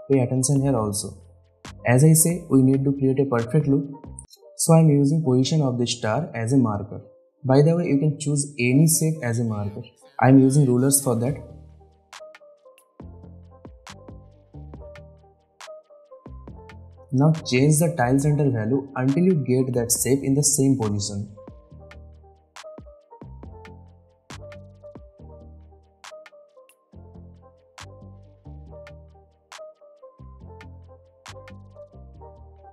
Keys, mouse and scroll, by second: 1.8 ctrl+r, 2.8-5.3 drag, 13.7 alt+scroll down 1, 14.1-15.5 drag, 16.3-16.7 alt+scroll up 1, 17.1 alt+scroll down 1, 19.1-21.0 drag, 27.9-29.0 drag, 29.8 space, 30.1-31.0 click, 30.9 space.